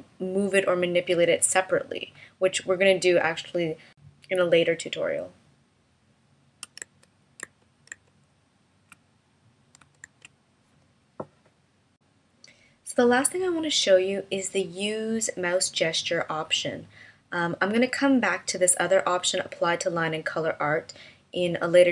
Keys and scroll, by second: 7.3 super+z, 7.9 super+z, 10.5 super+z.